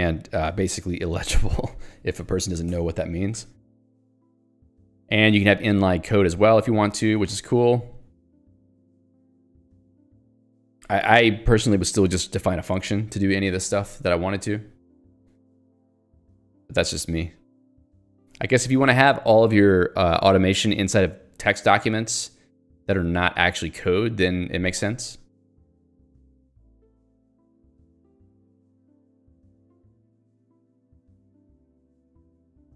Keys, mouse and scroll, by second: 0.3 click, 1.0 Escape, 3.4 j, 5.4 k, 7.0 j, 13.7 Escape, 17.5 j, 18.2 k, 25.2 j.